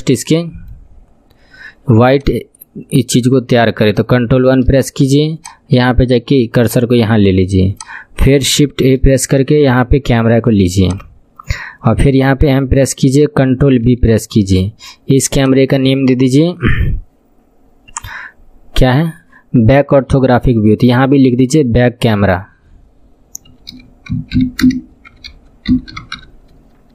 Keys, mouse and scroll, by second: 0.4 middle click, 0.9-1.6 scroll up 12, 2.1-4.0 drag, 2.1 scroll up 1, 4.0 ctrl+KP_1, 5.4-8.9 drag, 8.9 shift+a, 12.4 m, 13.9 ctrl+b, 15.2 click, 15.4-26.9 drag.